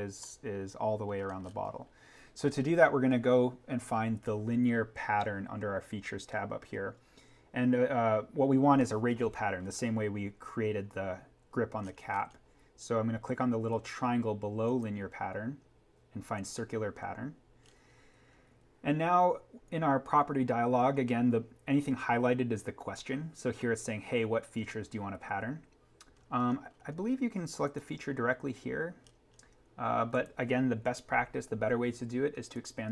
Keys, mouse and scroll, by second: 9.6-11.4 scroll down 1, 11.8-13.7 scroll up 1, 14.6 click, 17.7-18.3 scroll up 1, 20.2 scroll down 1, 26.2-26.9 scroll down 1, 27.6 click, 29.0-30.1 scroll up 1, 30.1 click, 30.8 Delete, 32.5 click.